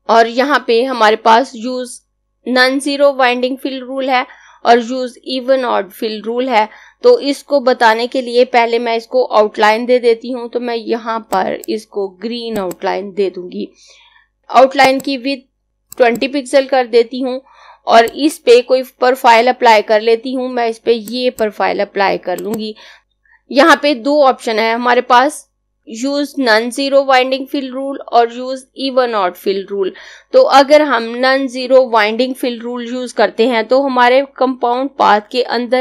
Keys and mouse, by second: 11.0 click, 14.4 z, 14.8 click, 20.9 click.